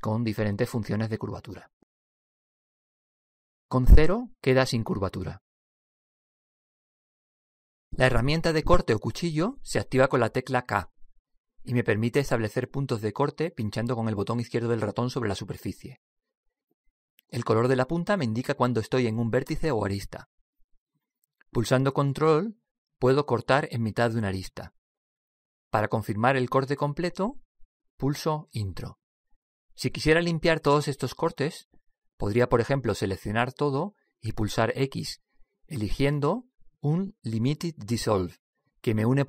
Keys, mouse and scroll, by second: 2.4 click, 4.6 click, 7.1-11.9 middle drag, 11.3 k, 29.8-33.5 middle drag, 33.5 a, 34.0 a, 35.4 x.